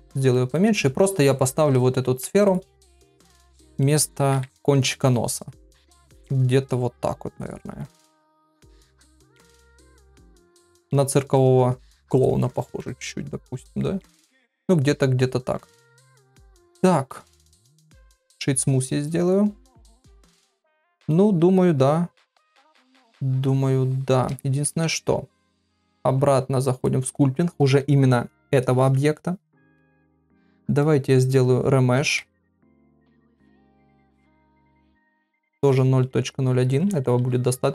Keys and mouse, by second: 0.3 middle click, 2.0 ctrl+a, 2.8 middle click, 4.3 KP_3, 5.6-7.4 drag, 8.1-9.6 middle drag, 10.5 shift+middle click, 11.3 click, 12.7-15.6 middle drag, 15.9 click, 16.3 ctrl+a, 17.2-18.3 right drag, 18.8-20.2 middle drag, 20.6 middle click, 24.6 ctrl+Tab, 29.5 ctrl+middle click, 30.9-33.6 drag, 34.6 click, 36.7 [, 36.9 [.